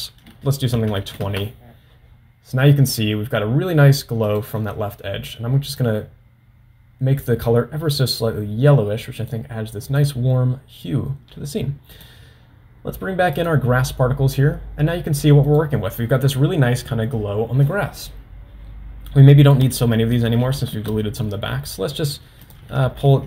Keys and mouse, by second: 12.0 click, 13.7 click, 15.8 drag, 19.5-21.9 drag, 22.6-23.2 drag.